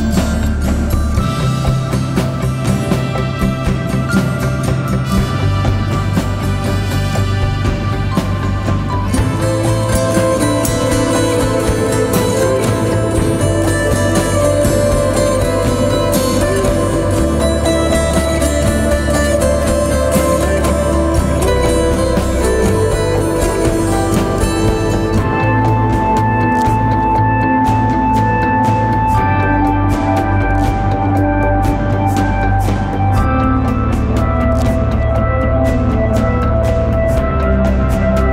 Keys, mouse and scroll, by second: 0.6-13.4 shift+drag, 14.2 click, 15.0 click, 15.6 ctrl+a, 19.0 shift+b, 20.9-23.4 typing, 24.8 shift+n, 25.1 shift+i, 25.9 shift+a, 27.8 click, 32.2 click, 34.6 shift+click, 35.5 right click, 36.2 click.